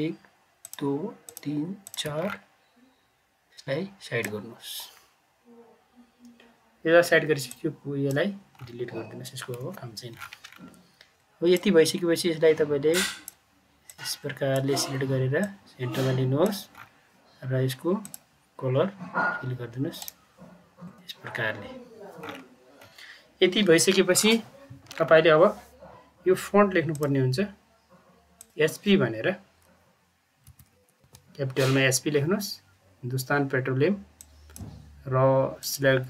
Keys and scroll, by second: 9.5 Delete, 30.4 Caps_Lock, 30.6-31.5 typing.